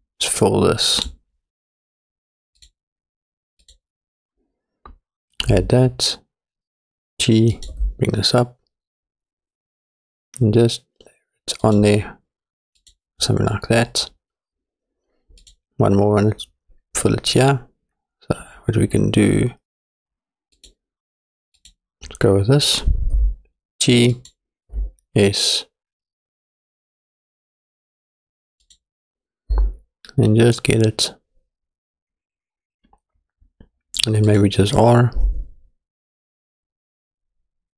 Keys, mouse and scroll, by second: 1.0-2.7 drag, 3.6 click, 5.5 s, 7.7 g, 12.8 click, 15.5-20.7 drag, 21.6 click, 23.2 g, 26.2 s, 29.5 g, 32.8 click, 34.3 click, 35.2 r.